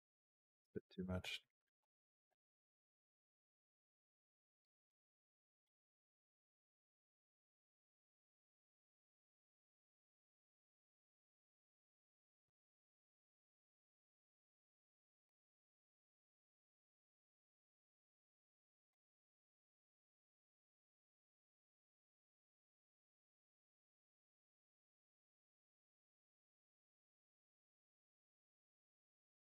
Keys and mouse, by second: 0.7 middle click, 1.2 middle click, 2.1-4.4 drag, 4.7 click, 4.9 g, 5.7 click, 5.8 space, 7.8 space, 8.1 click, 8.3 space, 9.4 space, 9.8-12.4 drag, 12.7 g, 15.8 click, 16.6 space, 18.7 click.